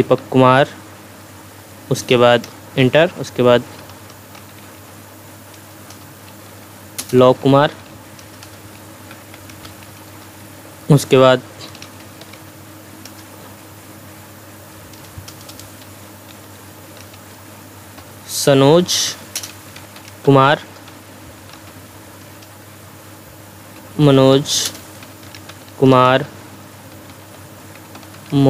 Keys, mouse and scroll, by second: 0.0-0.5 typing, 2.5 Return, 3.8-4.7 typing, 6.3-10.2 typing, 11.5-12.9 typing, 16.3-22.2 typing, 23.5-28.4 typing.